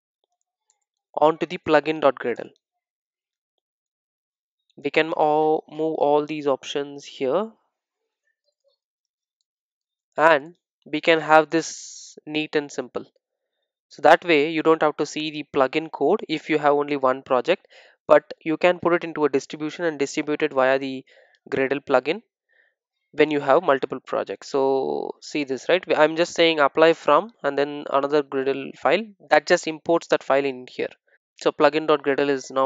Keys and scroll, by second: 1.5 super+e, 9.0 super+v, 9.8 super+e, 27.0 ctrl+shift+super+F12, 31.1 super+e.